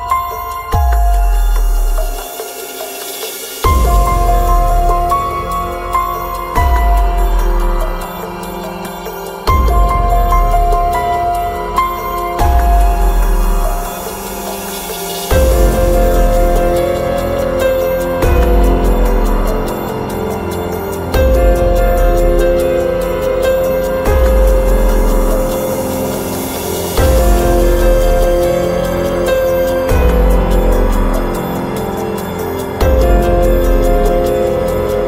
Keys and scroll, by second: 14.4 Escape, 22.8 Return, 32.3 Return.